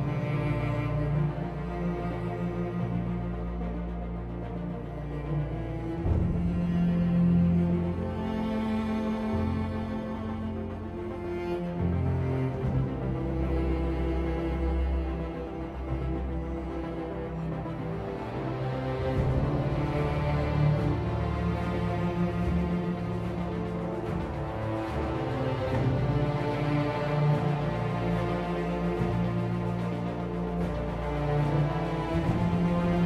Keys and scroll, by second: 0.4 r, 4.1 r, 14.3 3, 14.4 Return, 30.1-31.6 typing.